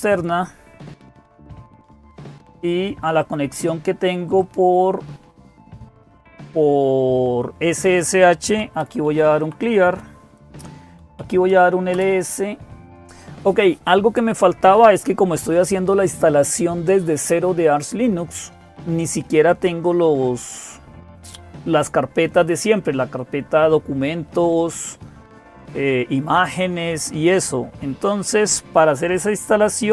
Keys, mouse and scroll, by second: 0.0-29.9 typing, 3.0 click, 4.1 click, 11.7 Return.